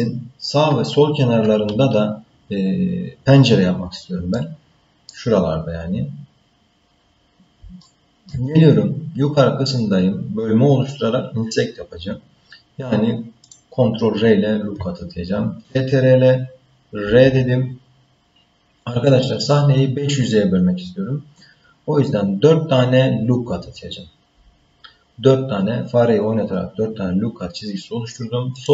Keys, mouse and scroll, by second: 4.3 middle click, 5.4-6.0 scroll down 2, 6.0 scroll up 2, 6.6 scroll down 1, 7.8 shift+middle click, 13.4 click, 17.0 ctrl+r.